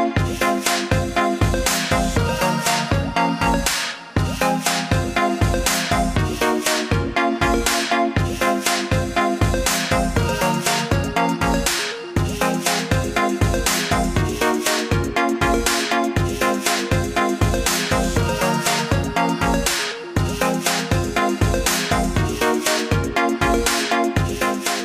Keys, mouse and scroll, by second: 19.2 click.